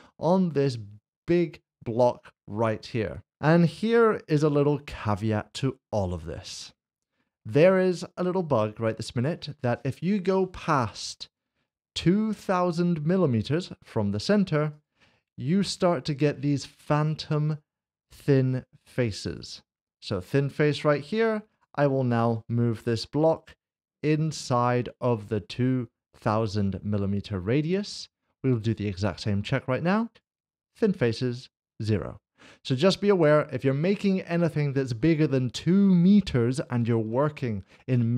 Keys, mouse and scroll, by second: 6.4 middle click, 6.6 scroll down 1, 7.4 middle click, 11.9 click, 14.7 click, 18.0 click, 21.5 click, 22.3 g, 22.9 z, 24.2 click, 29.0 click, 32.5 click, 32.7 shift+middle click, 36.0 middle click, 36.6 shift+middle click, 37.5 scroll up 1.